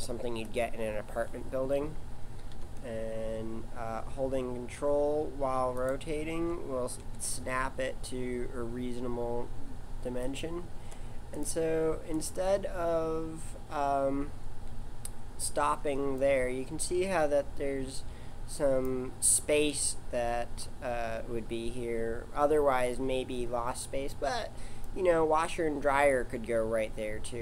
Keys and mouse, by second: 2.5 r, 7.0 g, 11.5-15.8 right drag, 15.8 middle click.